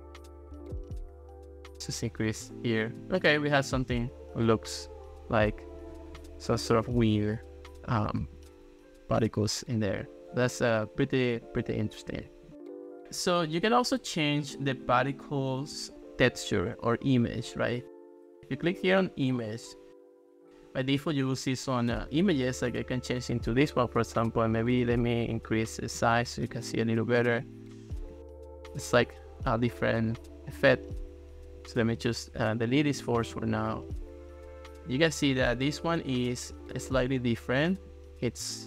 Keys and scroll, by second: 0.4 super+z, 33.3 BackSpace.